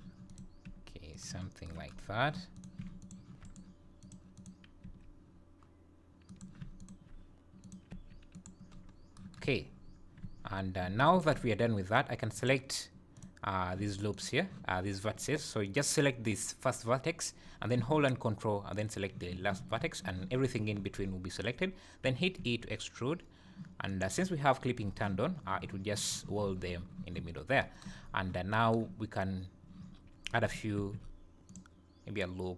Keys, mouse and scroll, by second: 0.3 click, 0.7 g, 1.5 scroll down 1, 2.2 scroll down 1, 2.6 click, 3.0 shift+click, 3.4 right click, 4.4 click, 4.8 g, 6.8 shift+click, 7.6 click, 7.9 g, 8.8 scroll down 6, 9.4 Tab, 9.8 scroll down 1, 10.2 Tab, 10.5 scroll up 2, 12.4 click, 13.2 click, 14.1 ctrl+click, 15.6 click, 18.7 ctrl+click, 22.0 e, 28.1-28.5 scroll up 2, 30.0 scroll down 1, 30.7 ctrl+r.